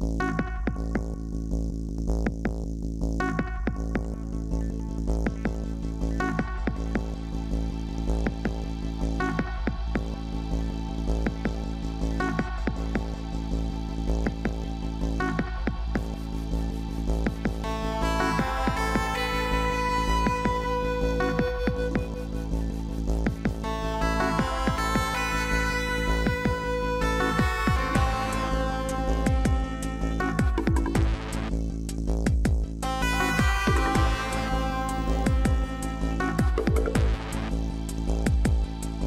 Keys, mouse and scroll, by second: 1.3 ctrl+=, 2.1 ctrl+=, 3.2 ctrl+-, 31.8-32.9 typing, 38.5 typing.